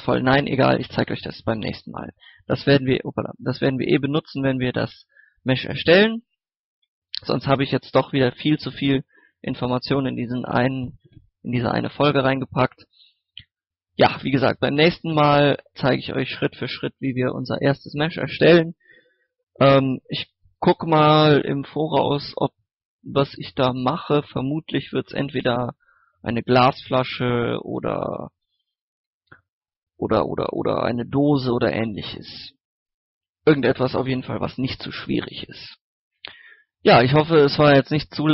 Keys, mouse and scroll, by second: 0.1-1.3 typing, 0.9 click, 2.1 ctrl+s, 3.2 click, 3.9 scroll up 1, 4.2 shift+middle click, 4.9-5.3 scroll down 1, 5.3 middle click, 6.9 click, 13.0-13.7 scroll down 2, 13.7 scroll up 1, 14.0-16.0 middle drag, 35.7-36.2 scroll down 1, 36.2-38.3 middle drag.